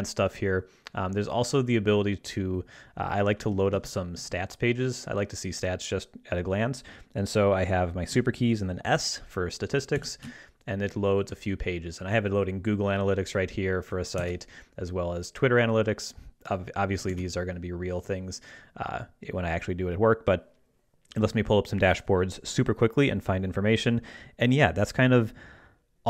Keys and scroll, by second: 3.7 ctrl+Right, 10.0 ctrl+alt+super+s, 14.2 super+w, 17.1 super+w.